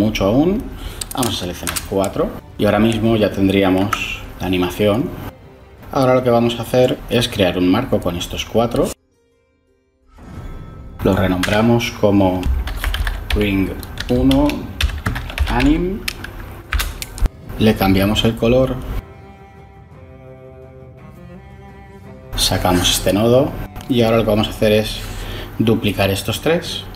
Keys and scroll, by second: 1.2 4, 1.5 Return, 10.1 ctrl+j, 11.3 F2, 12.3-17.1 typing, 26.4 shift+d.